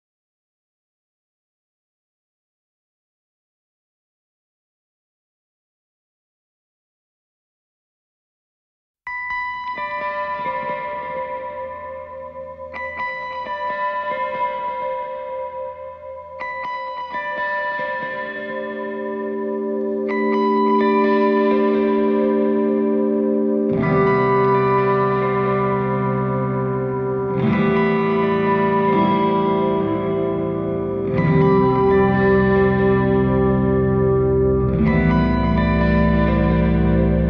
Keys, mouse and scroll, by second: 0.1-3.2 drag, 3.4-4.2 scroll down 9, 4.2-5.8 middle drag, 5.8 click, 10.3-11.0 scroll up 3, 11.0-12.1 middle drag, 12.1-16.5 drag, 17.2-18.2 middle drag, 18.2-21.2 drag, 21.4 scroll down 2, 21.9-23.1 middle drag, 23.1-23.9 scroll up 5, 23.9-29.2 drag, 30.4-31.0 scroll down 7, 32.3-32.9 scroll down 5, 32.9-33.8 middle drag, 33.8 shift+a.